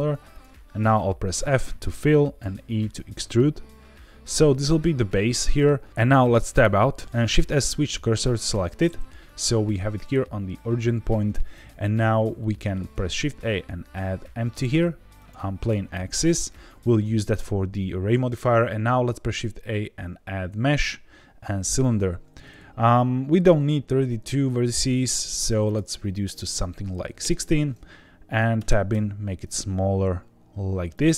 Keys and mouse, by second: 0.3 click, 1.3 f, 2.4 e, 5.4 click, 5.9 Tab, 6.5 Tab, 7.0 shift+s, 7.3 shift+s, 12.6 shift+a, 18.6 shift+a, 25.6-27.7 drag, 28.5 Tab, 28.9 s, 30.9 click.